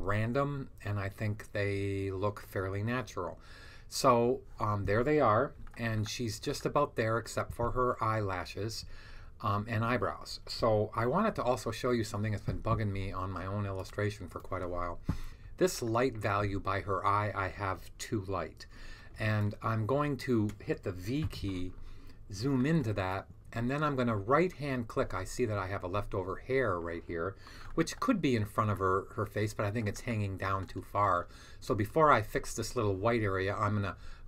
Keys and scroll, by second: 21.1 v.